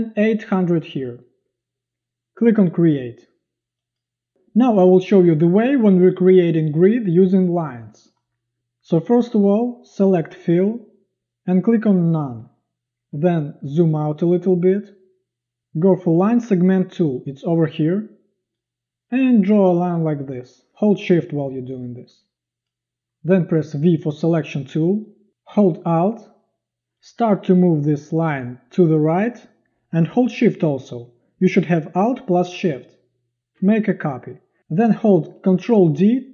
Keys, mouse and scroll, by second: 0.1 8, 0.5 0, 4.1 click, 13.1 z, 23.9 v, 35.7 ctrl+d.